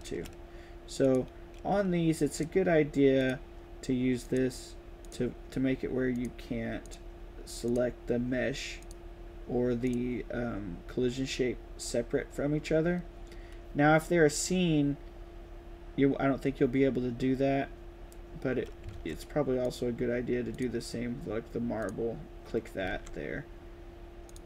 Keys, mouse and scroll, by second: 0.9 click, 2.2 click, 3.1 click, 4.1 click, 4.9 click, 6.0 click, 6.7 click, 7.5 click, 8.7 click, 9.7 click, 18.8 ctrl+s, 19.5 click, 20.4 drag, 21.7 drag, 22.8 ctrl+s.